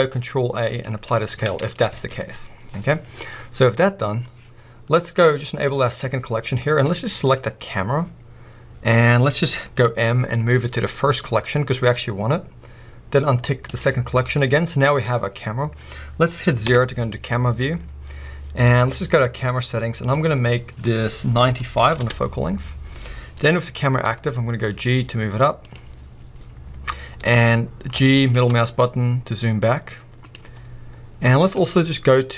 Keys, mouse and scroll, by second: 1.9 alt+a, 3.4 scroll down 1, 5.7 click, 6.2-6.6 scroll down 1, 6.6-7.2 middle drag, 7.2 click, 9.8 m, 13.7 click, 14.5-19.2 middle drag, 14.8-16.6 scroll up 2, 16.6 KP_0, 19.2 click, 20.0-25.7 drag, 22.1 Return, 24.0 g, 28.0 g, 30.3 click, 30.4 g, 31.3 click.